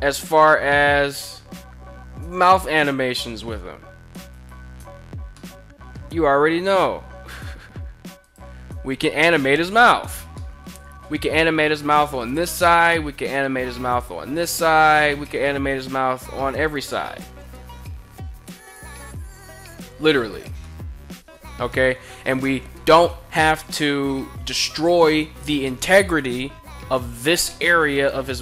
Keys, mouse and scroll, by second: 2.1 click, 3.2 r, 3.9 right click, 4.8-5.5 middle drag, 5.8 r, 7.6 click, 7.9 click, 8.2 r, 9.6 right click, 9.8 middle click, 10.4 r, 10.6 r, 11.8 click, 12.0 middle click, 12.8 r, 13.0 r, 14.3 click, 14.6-14.9 middle drag, 15.7 r, 16.2 right click, 16.4-16.9 middle drag, 17.1 r, 18.2 click, 18.4 r, 18.6 r, 19.7 click, 20.1-20.8 middle drag, 21.1 middle drag, 28.2 KP_1.